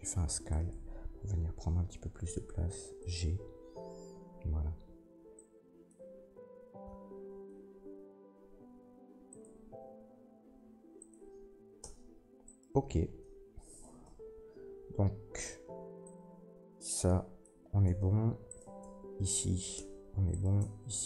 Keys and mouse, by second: 2.0 g, 5.3-9.4 drag, 8.3 s, 9.4-12.4 middle drag, 10.4 g, 11.8 Tab, 12.4 click, 12.6-16.0 middle drag, 14.0 Tab, 16.0-20.3 drag, 17.8 Tab, 18.4 middle click, 18.4 right click, 18.8 Tab, 19.7 Tab, 20.3 middle click, 20.4-21.0 drag, 20.5 Tab.